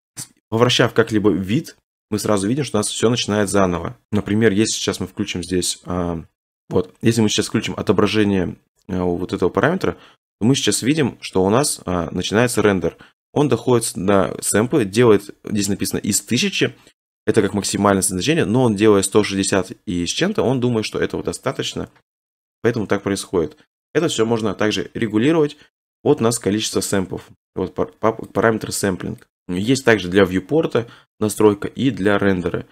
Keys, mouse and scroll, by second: 1.8 middle click, 1.9 middle click, 2.4 middle click, 2.5 middle click, 4.0 click, 4.4-4.8 middle click, 5.4 middle click, 6.5 click, 6.5 middle click, 7.0 middle click, 15.7 click, 16.0 click, 25.5 click, 25.9 click, 28.4 click, 29.3 click, 29.3-30.2 scroll.